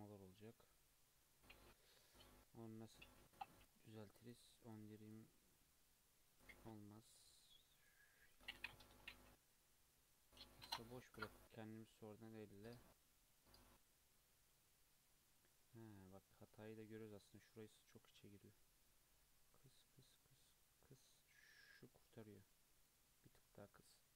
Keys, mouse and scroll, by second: 0.3 Tab, 2.5-2.9 scroll down 1, 3.2 click, 3.6 click, 4.2 click, 4.7 click, 5.0 click, 6.3 click, 7.8 click, 8.3 click, 8.5 click, 9.5-10.3 middle drag, 10.3 scroll down 1, 10.6-13.6 middle drag, 14.2-18.4 middle drag, 19.1-24.1 drag.